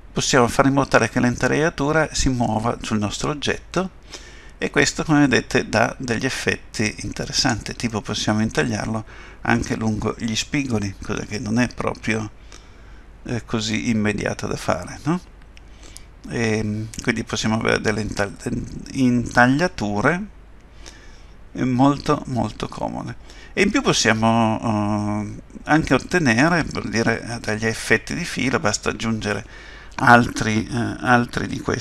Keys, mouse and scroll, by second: 7.9 middle click, 28.7 middle click.